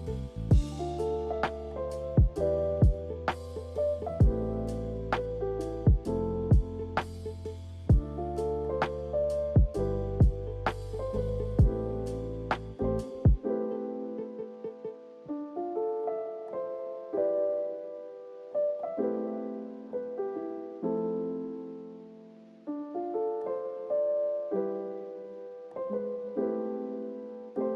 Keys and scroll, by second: 14.3 2, 14.5 Return, 22.2 a, 26.9 z.